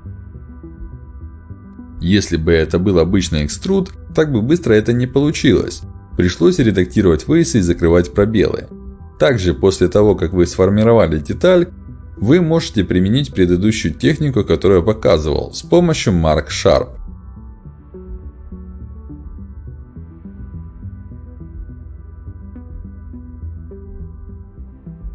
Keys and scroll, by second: 6.2 ctrl+alt+x, 9.0 ctrl+alt+x, 14.0 ctrl+alt+x, 15.2 ctrl+alt+x, 21.1 k, 22.5 space, 23.2 ctrl+z, 24.7 ctrl+alt+x.